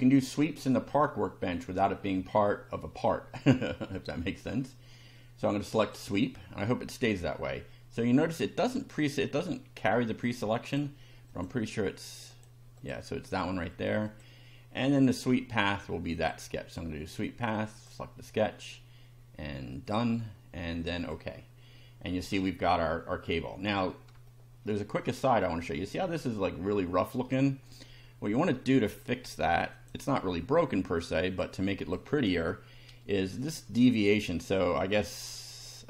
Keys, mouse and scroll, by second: 0.3-2.0 shift+middle drag, 3.6 shift+middle click, 4.2 shift+middle click, 5.8 click, 9.0-11.0 drag, 11.3 click, 12.3 click, 12.8 click, 14.1 click, 16.2 click, 17.8 click, 19.9 click, 21.0 click, 22.3-22.8 shift+middle drag, 22.9 shift+scroll up 1, 23.6 scroll up 1, 24.2-24.8 shift+middle drag, 29.7 click, 31.3 click, 31.8 click, 33.4 click.